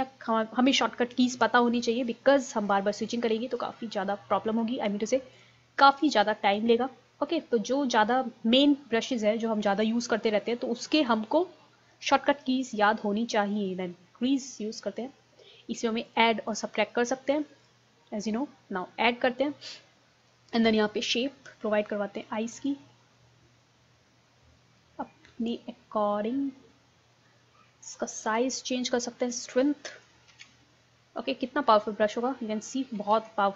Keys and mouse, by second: 6.7-9.0 middle drag, 16.1-18.9 drag, 18.9-22.2 middle drag, 22.7-24.4 drag, 24.6 middle click, 25.5-27.2 drag, 27.3 middle click, 28.1-29.9 drag, 29.9 ctrl+z, 30.3 ctrl+z, 33.2 ctrl+z.